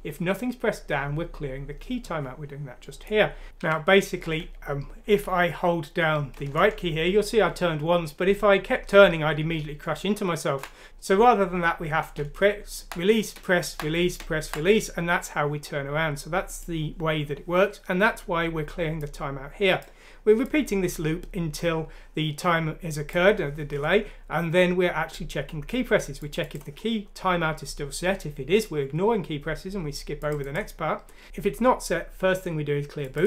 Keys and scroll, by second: 3.7-4.2 typing, 7.1-8.1 typing, 10.3-10.9 typing, 12.8 typing, 13.3 Right, 14.2 Right, 14.7-15.5 typing.